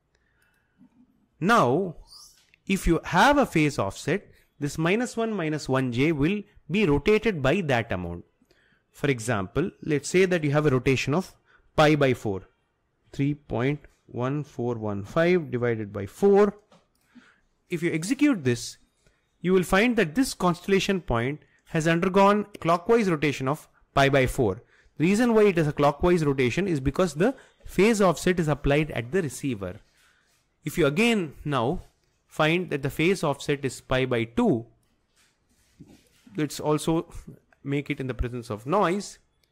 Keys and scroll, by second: 13.1-16.2 typing, 35.8 2.